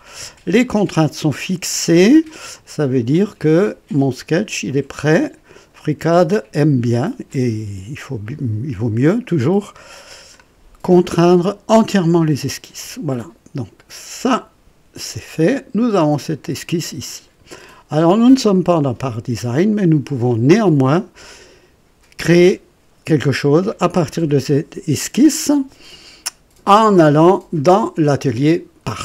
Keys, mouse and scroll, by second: 0.1-2.3 drag, 3.1-4.5 drag, 5.7 click, 7.3-10.5 drag, 14.2 click, 15.4-15.8 scroll down 2, 16.0 right click, 17.9 click.